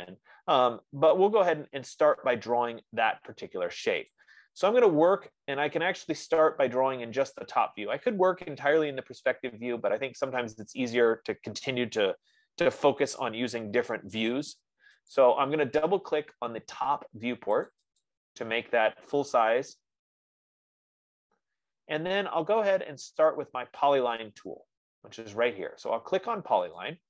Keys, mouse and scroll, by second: 4.7-9.4 drag, 15.5 click, 18.1 click, 18.9 click, 21.3-22.1 scroll, 22.7-23.1 scroll.